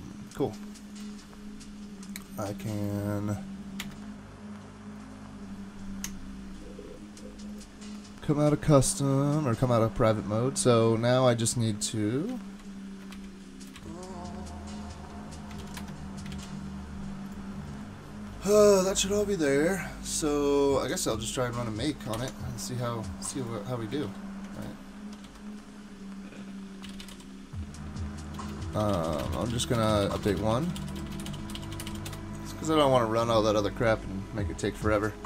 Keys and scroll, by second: 4.2 alt+super+Return, 12.5 super+z, 13.1 shift+super+z, 13.8 super+z, 15.6 super+f, 15.8 Escape, 16.3 super+s, 22.1 ctrl+c, 24.0 ctrl+c, 25.0-32.4 typing.